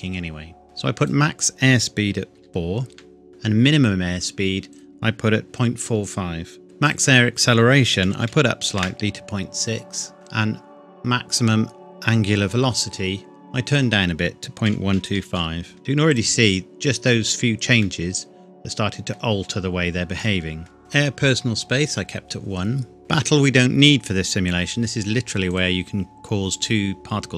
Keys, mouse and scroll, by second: 1.0 click, 2.3 KP_4, 2.9 KP_Enter, 4.7 click, 5.4 KP_Decimal, 6.9 click, 8.0 KP_Decimal, 8.3 KP_6, 8.7 KP_Enter, 13.6 click, 14.6 KP_Decimal, 14.9 KP_1, 15.1 KP_2, 15.3 KP_5, 15.8 KP_Enter, 16.1 click, 17.8 middle click, 23.0-23.7 scroll down 1, 25.5 click.